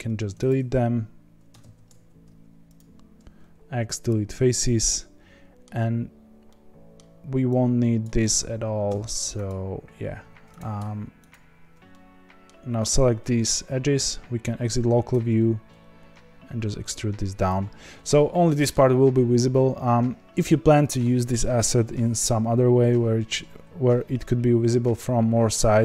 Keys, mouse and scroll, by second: 0.4 x, 1.6 ctrl+z, 2.7 x, 4.6-8.0 middle drag, 8.0 click, 9.4 x, 10.1 2, 10.5 click, 11.9-13.9 middle drag, 13.9 KP_Divide, 15.1 e, 18.4-25.8 middle drag.